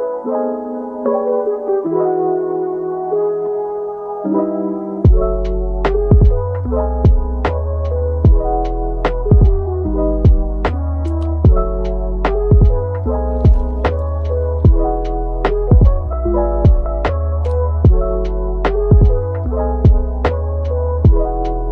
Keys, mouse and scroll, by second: 3.9 scroll down 1, 4.1 Tab, 4.6-5.0 scroll down 1, 5.0 middle click, 5.9-6.3 scroll up 1, 6.5 middle click, 6.9 Tab, 8.0 alt+click, 9.8-10.2 scroll down 1, 10.2 middle click, 11.3-11.8 scroll down 1, 11.8 Tab, 12.2 middle click, 13.4 Tab, 14.1 middle click, 17.7 scroll up 1.